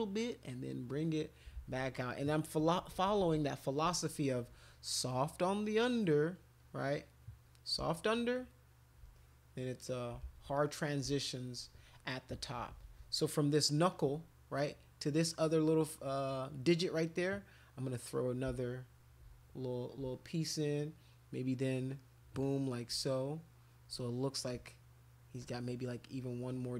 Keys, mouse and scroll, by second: 0.3 click, 0.8 click, 1.6 ctrl+z, 2.9 ], 3.1 ], 3.2 ], 3.3 ], 4.7 click, 4.8 click, 5.1 click, 5.4 click, 5.5 click, 5.7 click, 6.0 click, 6.3 click, 6.6 click, 6.8 click, 7.0 click, 7.2 click, 7.4 click, 7.6 click, 7.9 shift+click, 8.1 shift+click, 8.3 shift+click, 8.7 shift+click, 8.9 shift+click, 9.1 click, 9.6 click, 10.2 ctrl+z, 10.6 click, 11.2 alt+click, 12.4 [, 12.6 [, 12.8 [, 13.0 [, 13.9 click, 16.8 click, 17.2-18.4 drag, 18.6 shift+click, 19.6 click, 20.1 alt+click, 21.2 alt+click, 22.4 click, 23.0 alt+click, 23.9 click, 24.6 alt+click, 25.4 click, 26.2 click.